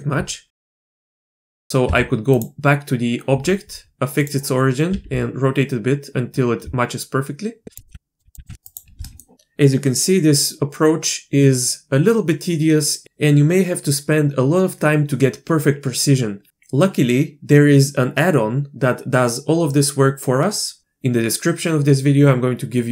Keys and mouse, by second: 0.6 Tab, 1.8 Tab, 2.3-4.9 drag, 4.9 r, 7.8 middle click, 7.9 r, 8.2 r, 8.3 r, 8.5 r, 9.0 drag.